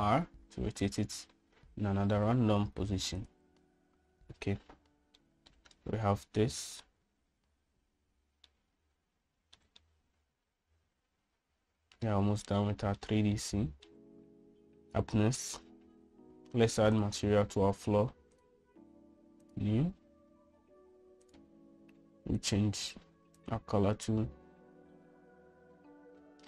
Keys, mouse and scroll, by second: 0.4 r, 6.4-8.0 middle drag, 9.6-10.7 shift+middle drag, 10.9-14.1 middle drag, 14.5 shift+middle click, 19.5-20.7 drag, 22.5 click, 23.5 click.